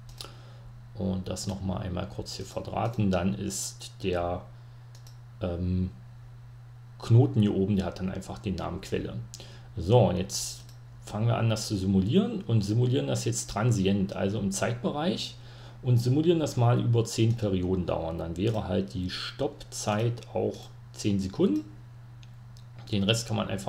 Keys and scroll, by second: 3.8 2, 4.0 BackSpace, 19.2-20.7 typing.